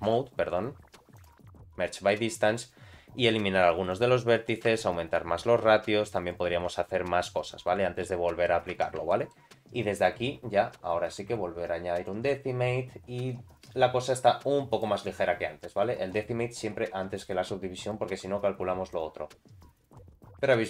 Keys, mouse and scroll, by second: 0.1 m, 3.9 click, 4.7-7.2 shift+drag, 8.1 middle click, 8.8 Tab, 9.1 shift+middle click, 12.1 click, 13.3-15.9 drag, 17.2 click, 18.9-20.6 drag.